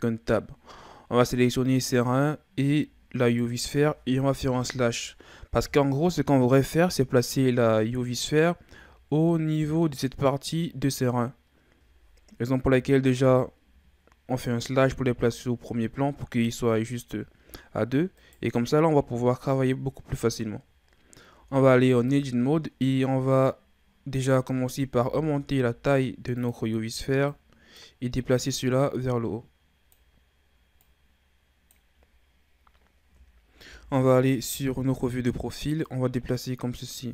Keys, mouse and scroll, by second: 2.0 right click, 3.2 shift+right click, 4.5 KP_Divide, 8.2 right click, 8.9-9.4 ctrl+scroll up 2, 9.4-12.4 middle drag, 14.8 KP_1, 18.2 right click, 19.1-20.2 shift+scroll down 3, 20.2-21.3 scroll up 2, 21.4 Tab, 22.3-24.9 ctrl+scroll up 3, 24.9 s, 27.2-33.7 drag, 33.7 KP_3, 34.9-35.9 scroll up 2, 35.9-37.1 drag.